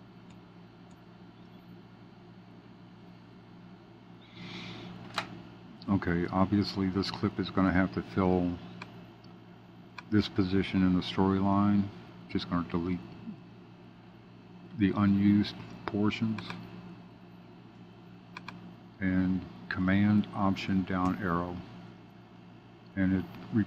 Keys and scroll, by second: 0.2 Up, 1.4 super+b, 21.0 alt+super+Down.